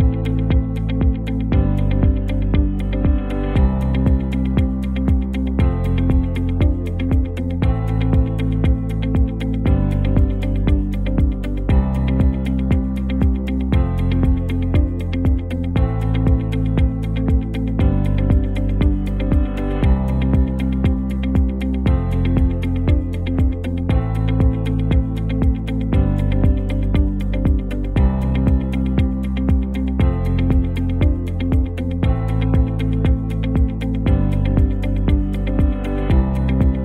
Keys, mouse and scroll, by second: 0.6 ctrl+t, 0.9 Right, 1.6 Up, 2.4 Right, 3.3 Up, 3.7 Return, 4.5 alt+scroll down 1, 6.9 click, 8.7 v, 10.4-11.1 alt+click, 11.6 t, 12.3 click, 12.7 ctrl+a, 13.8-15.8 typing, 16.0 ctrl+a, 16.6 click, 17.2 v, 18.0 click, 19.2 ctrl+t, 20.1-21.1 drag, 22.6 alt+scroll up 1, 23.0 space, 23.1-23.6 click, 23.5 space, 24.4-24.9 alt+click, 25.2 t, 25.3 click, 25.6 ctrl+a, 26.6-29.0 typing, 32.7 shift+space, 33.1 shift+0, 34.5-35.2 drag.